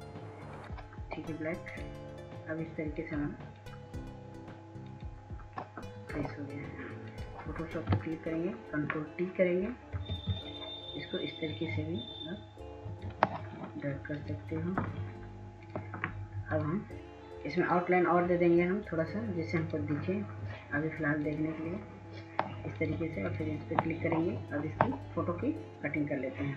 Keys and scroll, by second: 11.6 ctrl+t.